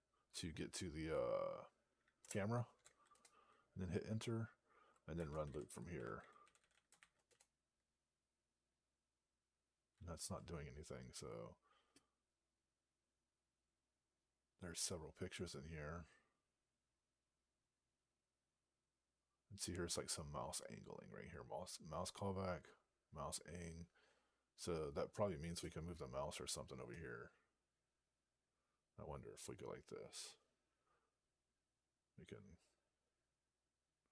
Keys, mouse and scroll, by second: 2.1 Return, 3.0 Return, 4.9-7.3 typing, 12.0-12.9 scroll down 6, 13.4 scroll down 1, 15.8 scroll down 10, 17.0 scroll down 12, 23.5-24.0 scroll down 21, 25.0 scroll up 13.